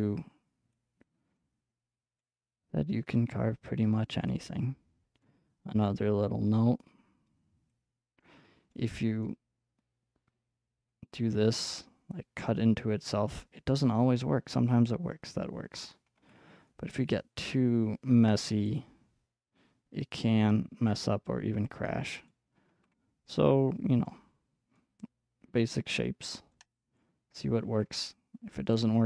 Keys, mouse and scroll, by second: 0.0-1.1 middle drag, 1.1-2.2 drag, 2.2-4.6 middle drag, 4.6 click, 5.0-7.7 middle drag, 7.7-8.7 drag, 8.7-12.1 middle drag, 12.1-14.2 drag, 13.1-16.7 middle drag, 16.2 ctrl+z, 18.7-21.7 drag, 22.3-25.9 ctrl+middle drag, 22.7 ctrl+z, 25.9-27.0 drag, 27.0 middle click, 27.7 ctrl+z, 28.7 click.